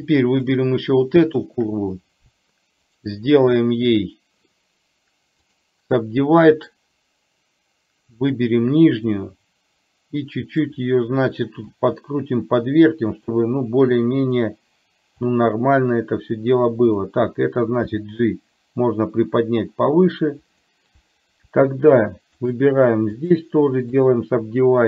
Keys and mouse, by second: 0.2 shift+click, 1.2 shift+click, 3.0-4.5 right drag, 5.5-6.9 right drag, 9.3-10.8 drag, 11.8 r, 14.0 click, 15.3-17.2 drag, 18.0 g, 22.0 shift+click, 23.2-24.2 right drag.